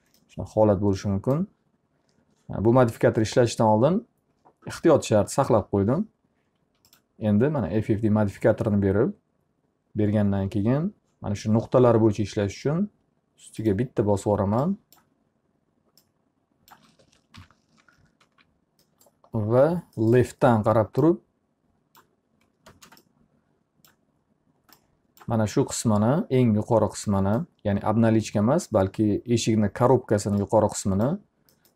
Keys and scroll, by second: 17.5 l, 18.8 z, 22.8 space.